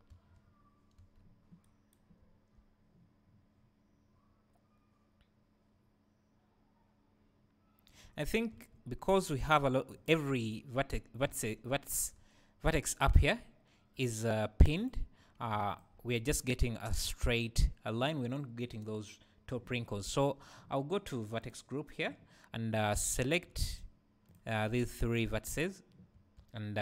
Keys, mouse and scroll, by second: 0.3 Escape, 2.2 `, 9.9 click, 10.3 Tab, 11.3 alt+a, 12.2 `, 14.8-15.8 drag, 21.4-22.3 drag, 22.8-24.7 drag, 24.7 `.